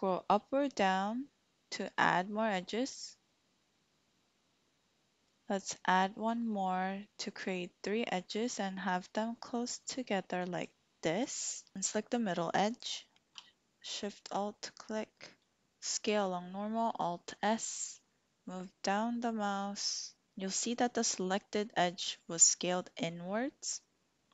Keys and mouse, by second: 10.5 click, 13.8 alt+shift+click, 15.5 alt+s.